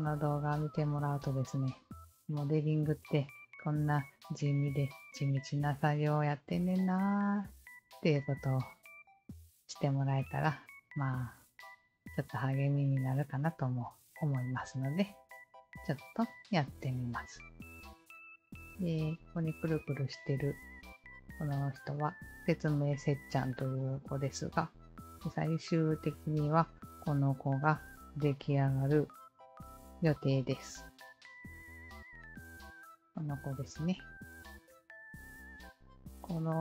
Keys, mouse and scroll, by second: 29.0 click, 31.5 click, 32.3 click, 34.4 alt+click, 35.3 alt+click, 36.2-36.5 alt+drag.